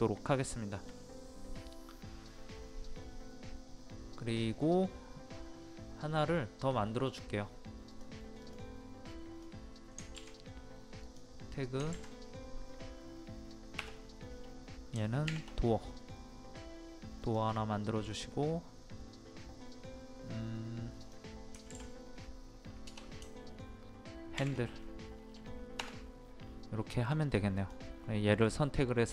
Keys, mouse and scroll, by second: 0.3 scroll down 1, 0.6 middle click, 0.7-3.8 scroll up 1, 7.9 click, 11.1 click, 13.8 BackSpace, 17.2 click, 22.9 BackSpace, 25.8 Return, 27.6 click.